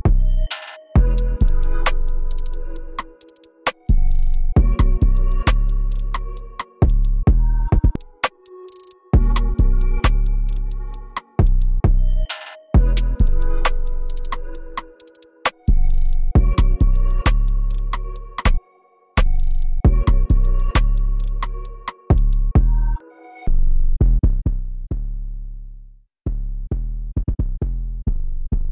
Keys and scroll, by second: 0.0 e, 1.3 ctrl+b, 2.9 p, 18.5 t, 20.7 p, 22.9 ctrl+shift+l.